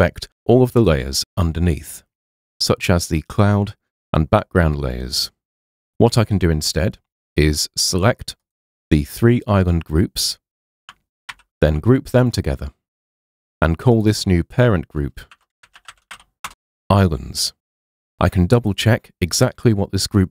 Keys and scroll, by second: 11.3 super+g, 15.1-16.7 typing.